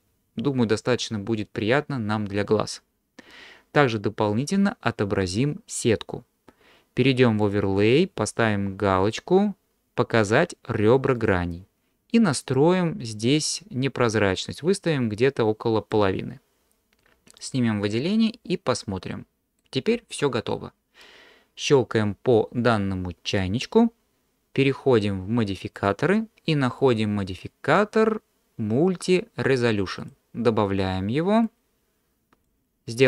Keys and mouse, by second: 7.6-16.6 drag, 18.1-19.6 middle drag, 23.3 click, 25.8 click, 26.9-30.1 drag, 31.4-32.5 drag.